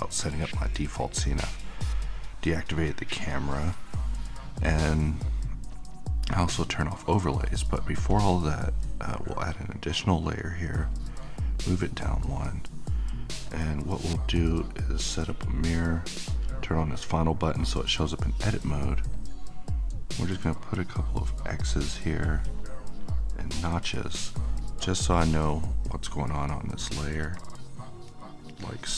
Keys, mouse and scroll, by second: 1.8-5.7 middle drag, 5.7 click, 13.5 click, 19.1 click, 22.0-28.9 drag.